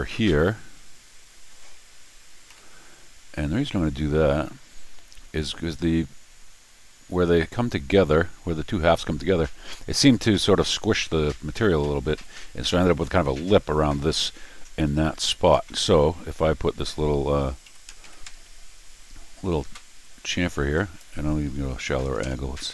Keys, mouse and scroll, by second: 2.5 y, 20.8 click.